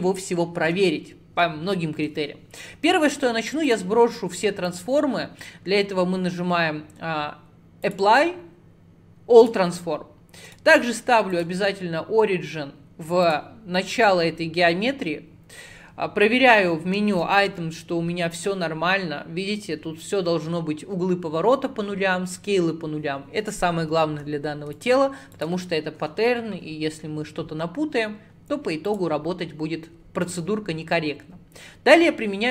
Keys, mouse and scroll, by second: 3.1-6.2 drag, 10.5-13.5 right drag, 17.6 n, 18.4 click, 24.8 click, 25.4 click, 28.9-32.0 drag.